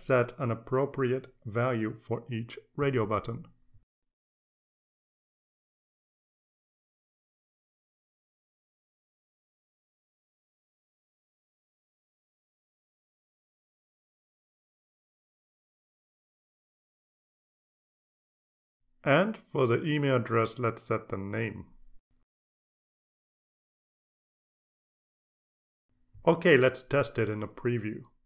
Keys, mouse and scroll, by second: 4.1 click, 5.8 click, 6.6 shift+s, 7.3 click, 8.3 click, 8.6 shift+m, 9.4 click, 9.9 click, 10.2 shift+l, 10.8 click, 11.3 click, 11.7 shift+x, 12.7 click, 13.3 click, 13.3-15.3 typing, 14.1 click, 14.5 click, 15.8 click, 16.4 click, 16.6-19.3 typing, 17.6 click, 18.1 click, 22.6 click, 23.2 click, 23.9 click, 24.0-25.3 typing, 25.6 click.